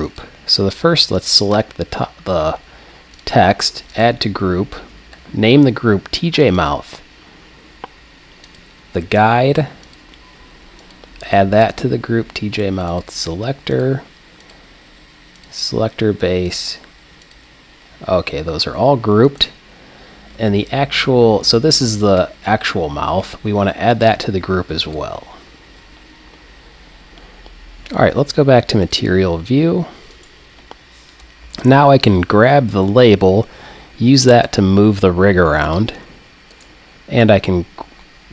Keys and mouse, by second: 0.0-3.1 drag, 3.2-5.7 drag, 8.5-11.6 drag, 12.9-18.1 drag, 18.2 click, 19.3-21.0 right drag, 24.0-25.9 drag, 27.9-29.8 drag, 30.1-31.7 right drag, 31.5 g, 35.8-36.6 drag, 36.6-38.2 middle drag, 38.2 right click.